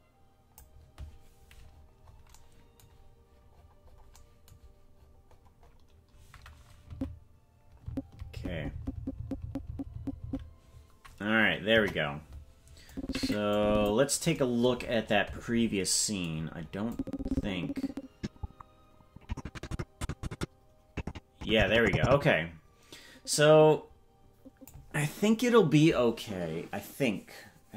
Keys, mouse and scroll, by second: 1.7-2.3 scroll up 12, 3.5-4.1 scroll up 7, 5.0-6.4 scroll up 11, 7.0 Right, 8.1 Right, 8.4-9.0 Right, 9.2 Right, 9.4 Right, 9.7 Right, 10.0 Right, 10.2 Right, 11.7 KP_0, 12.9 click, 13.5 click, 14.7-15.8 scroll down 26, 16.3-18.0 scroll down 6, 16.9-24.7 drag.